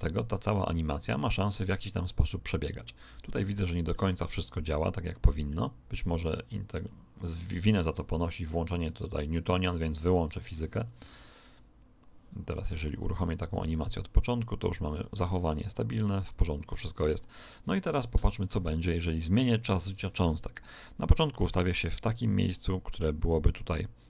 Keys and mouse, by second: 2.9-6.5 middle drag, 5.9 right click, 6.8-8.7 middle drag, 9.7 click, 11.1 alt+a, 12.4 Escape, 13.1 click, 13.7 alt+a, 14.9-18.5 middle drag, 17.7 KP_1, 19.1 Escape, 21.1 click.